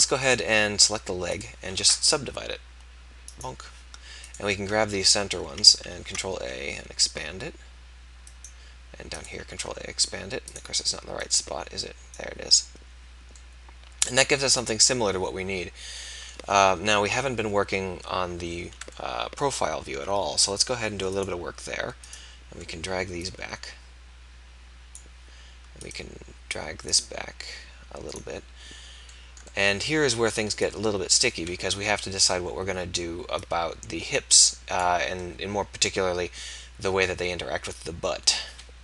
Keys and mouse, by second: 3.3-4.6 drag, 6.1 ctrl+a, 9.6 ctrl+a, 16.8 KP_3, 20.4 middle click, 30.9 middle click, 31.8-35.0 drag, 31.8 KP_3.